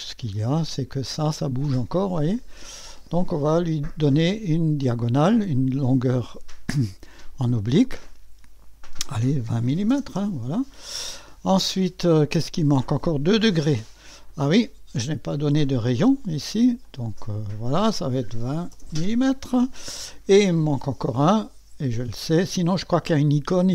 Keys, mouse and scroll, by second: 0.0-2.1 drag, 2.7 click, 7.1 click, 9.4-10.4 typing, 15.5 click, 16.8 click, 18.3-19.2 typing, 20.9-21.3 scroll up 1, 21.1 typing.